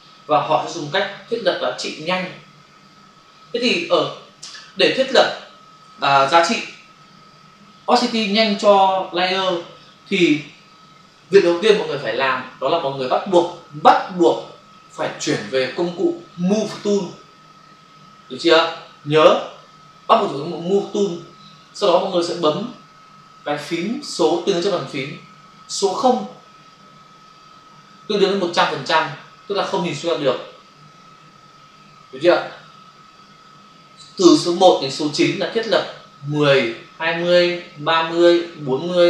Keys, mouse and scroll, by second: 4.5 Return.